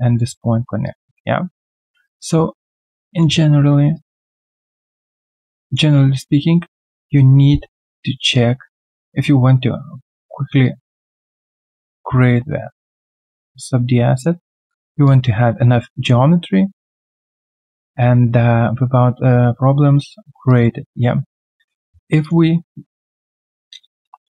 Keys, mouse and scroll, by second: 24.0 q.